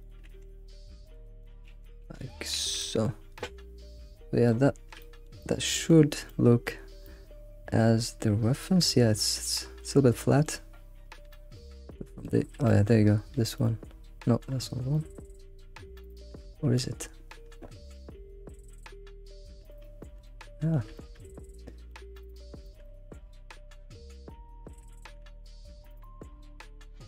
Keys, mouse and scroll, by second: 0.0 shift+click, 0.3 alt+s, 0.3 alt+s, 1.4 click, 1.6 alt+s, 1.7 alt+s, 2.5 ctrl+s, 2.8-3.2 middle drag, 3.2 scroll down 1, 3.4-4.7 middle drag, 4.7 scroll down 4, 5.0-6.1 shift+middle drag, 6.1 scroll down 3, 6.3-8.9 shift+middle drag, 8.9-9.4 scroll up 5, 9.4 shift+middle click, 9.8-10.2 scroll down 5, 10.2 shift+middle click, 10.8-11.3 scroll down 6, 11.3-12.4 shift+middle drag, 12.4-13.6 scroll up 6, 12.7 shift+middle click, 13.6 shift+middle click, 14.5 scroll up 1, 14.6-14.9 scroll down 4, 14.9-16.4 shift+middle drag, 16.4-16.7 scroll up 4, 16.7-18.2 shift+middle drag, 17.9-18.9 scroll down 6, 18.9-20.0 scroll up 2, 20.0-21.2 shift+middle drag, 21.2-21.9 scroll up 4, 21.9 middle click, 22.3 scroll up 2, 22.6-24.2 shift+middle drag, 24.2 click, 25.1 g, 25.9 g, 26.9 click.